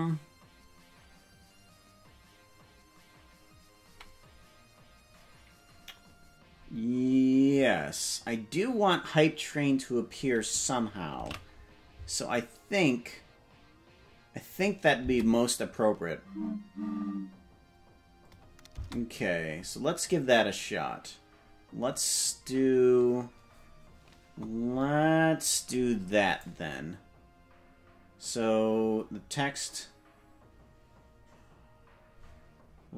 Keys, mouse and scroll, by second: 11.9 ctrl+s, 15.0 space, 18.7 space, 22.4-23.1 scroll down 4, 24.3-24.9 scroll up 9, 26.4-32.9 drag.